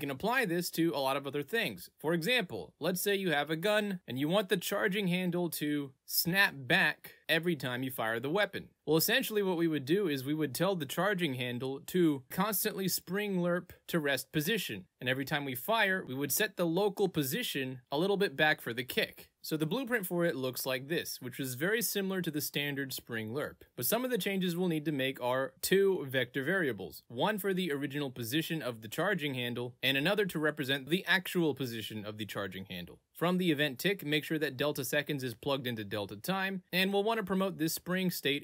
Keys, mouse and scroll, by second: 1.7 click, 1.9 middle click, 2.8 click, 3.3 click, 4.5 click, 5.9-9.5 drag, 10.0 ctrl+z, 10.7 click, 13.0 F11, 13.4 alt+p, 14.3 click, 15.1 v, 19.9 click, 23.0 click, 25.4 click, 26.7 click, 28.1 click, 30.7 click, 33.0 click, 37.2 click, 37.5 right click.